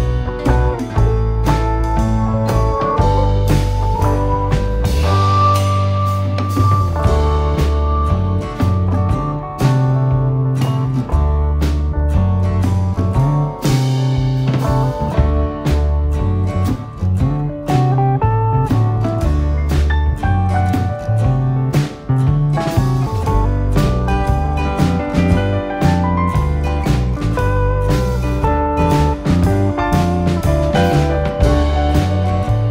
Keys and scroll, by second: 19.0 Escape, 20.7 d, 23.0 9, 23.3 Return, 25.0 Escape.